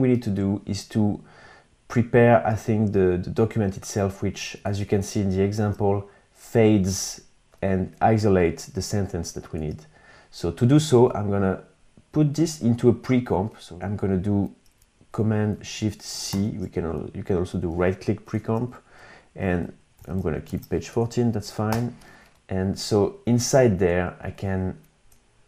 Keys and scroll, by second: 4.0 super+Tab, 8.9 super+Tab, 15.6 shift+super+c, 18.8 Right, 19.0 alt+shift+Left, 19.5 alt+shift+Left, 19.9 super+x, 20.2 BackSpace, 21.0 Return.